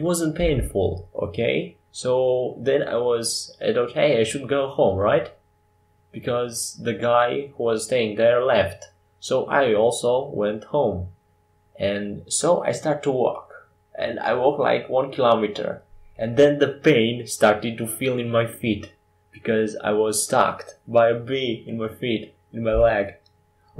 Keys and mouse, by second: 1.5-6.9 middle drag, 6.9 r, 12.2-14.8 middle drag, 14.8 r, 18.9 middle click, 21.8 KP_5.